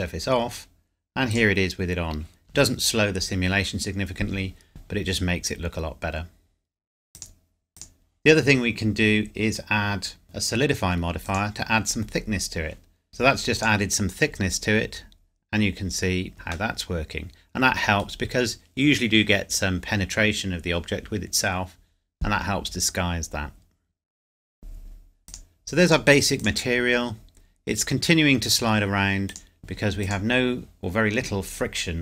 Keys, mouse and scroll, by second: 7.1 shift+click, 13.1 middle click, 13.5 click, 14.2 scroll down 1, 14.9 scroll down 1, 15.1 scroll up 1, 15.6 scroll up 1, 15.8 scroll down 1, 16.3 KP_Decimal, 16.4-16.7 scroll down 1, 16.7 middle click, 25.3 click, 29.3 click.